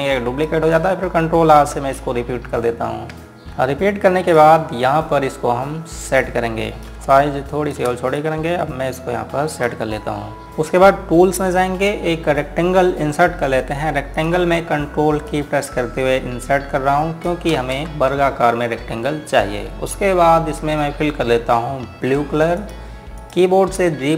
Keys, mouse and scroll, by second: 2.5-4.2 typing, 4.4 scroll down 1, 5.1 click, 6.9 g, 7.9 click, 8.9 click, 10.7 click, 14.9 click, 16.1 click, 18.3 space, 23.1 click.